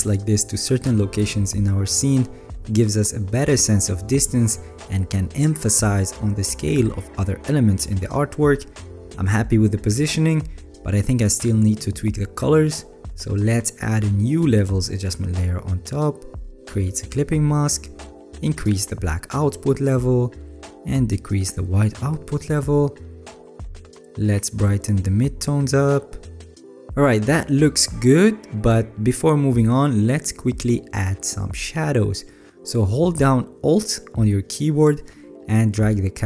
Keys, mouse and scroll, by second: 3.6-3.9 alt+scroll up 5, 4.5-5.2 alt+scroll up 6, 5.3-6.0 alt+scroll, 11.2-11.8 alt+scroll down 12, 12.4-12.7 scroll down 3, 12.7-13.1 alt+scroll, 13.5 alt+scroll.